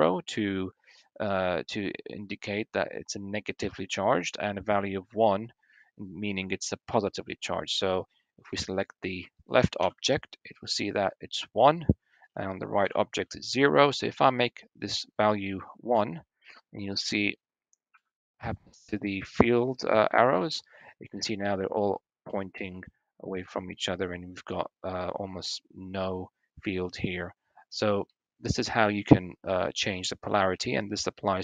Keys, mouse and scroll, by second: 8.5 click, 9.6 l, 14.9 click, 18.0 Tab, 18.6 shift+middle drag, 19.7 shift+click, 24.3 click.